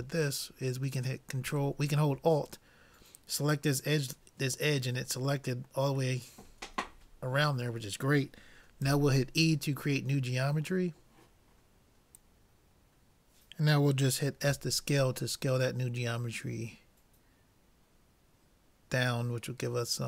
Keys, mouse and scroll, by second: 1.0-2.7 drag, 6.2-8.0 middle drag, 8.9 e, 10.6-11.9 middle drag, 14.5 s.